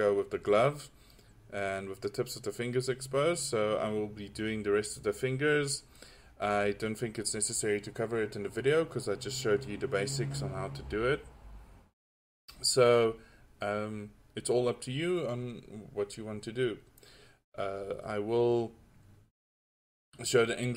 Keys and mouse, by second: 13.8-14.4 drag, 16.5-20.7 drag.